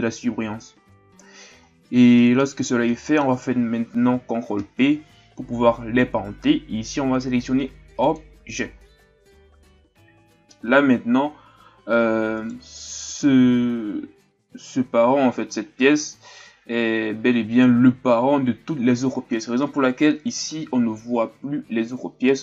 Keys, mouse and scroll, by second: 1.6-2.2 scroll down 1, 2.2-4.5 middle drag, 4.5 ctrl+p, 12.4 right click.